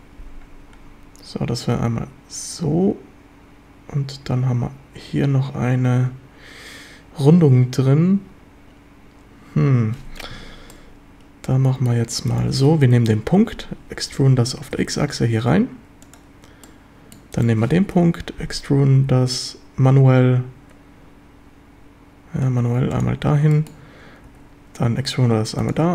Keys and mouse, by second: 10.7-11.9 drag, 13.1 KP_7, 14.1 e, 14.7 x, 16.0 click, 16.6 click, 17.9 KP_7, 19.0 e, 23.5 shift+click, 24.3 e, 25.6 click.